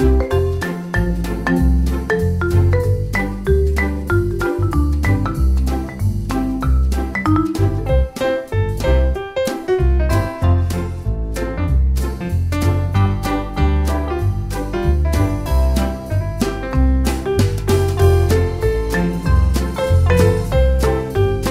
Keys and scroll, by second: 1.0 Escape, 2.6 e, 2.8 space, 11.7 m, 11.8 space, 12.8 1, 13.0 0, 13.7 Return, 15.8 e, 15.9 space, 19.8 e, 20.0 space.